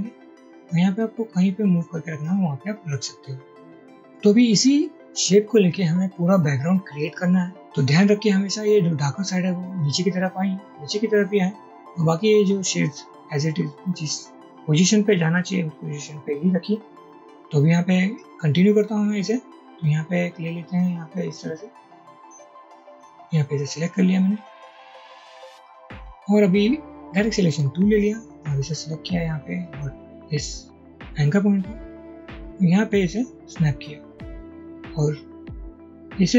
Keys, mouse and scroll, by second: 4.1 double click, 21.7-23.9 alt+drag, 27.6 a, 28.1-30.3 drag, 32.1-34.3 drag.